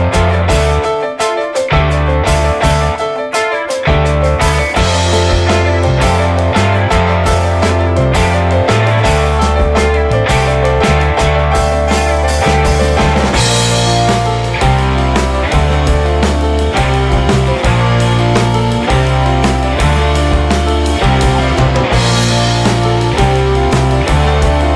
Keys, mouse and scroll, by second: 0.1 ctrl+z, 0.7 shift+middle click, 1.0 Tab, 1.5 a, 2.2 ctrl+a, 4.1 click, 4.3 shift+middle click, 4.8-5.2 shift+scroll up 1, 5.2 ctrl+s, 5.5 shift+middle click, 6.0 ctrl+s, 6.2 click, 6.4 shift+middle click, 7.0 Tab, 7.3 drag, 7.6 shift+middle drag, 7.9 drag, 8.6 scroll down 1, 9.1-11.3 shift+drag, 12.4-16.2 shift+drag, 17.2 drag, 17.4 scroll down 1, 17.6-17.9 middle drag, 17.9 s, 18.1-18.7 shift+middle drag, 18.7 ctrl+s, 18.8 click, 19.0-19.6 middle drag, 19.6 ctrl+s, 20.0-20.7 scroll down 6, 20.7-24.7 middle drag, 21.8-22.4 scroll up 4, 24.4-24.7 scroll up 4.